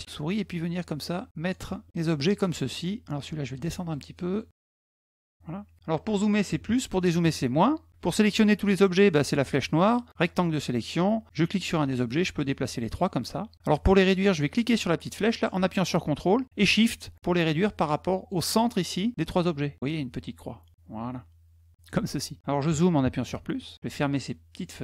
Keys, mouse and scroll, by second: 1.9 click, 2.4 middle click, 2.5 middle click, 3.3 click, 3.6 click, 4.1 click, 4.5 click, 9.3 click, 10.0 click, 11.3-12.7 drag, 13.0 middle click, 14.5-18.1 drag, 19.7-21.6 ctrl+shift+drag, 24.3 click.